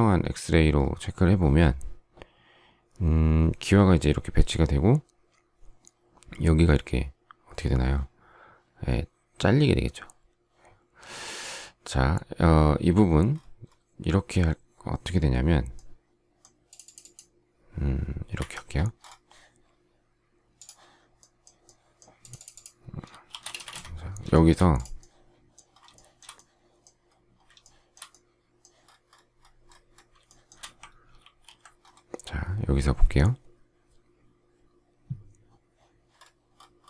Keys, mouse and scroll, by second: 18.3 Escape, 23.2 shift+r, 23.5 space, 23.6 Escape, 24.2 shift+middle click, 25.9 shift+middle click, 27.5 shift+middle click, 30.2 shift+middle click, 31.1 alt+t.